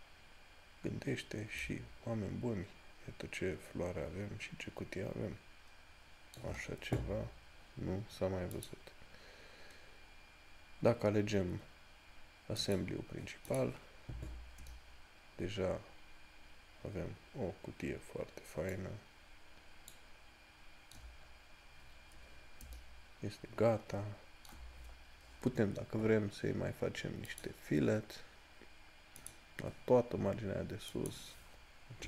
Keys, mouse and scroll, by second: 0.4 scroll down 1, 1.9 shift+middle click, 8.8 click, 12.9 click, 21.5 scroll up 1, 27.6 middle click.